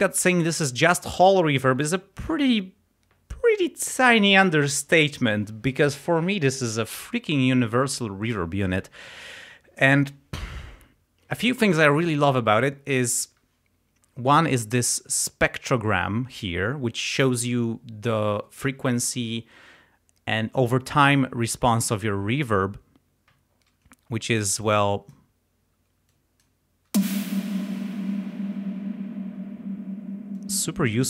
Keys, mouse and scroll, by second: 24.6 click, 26.1 click, 26.9 space, 27.9 space, 30.4 click.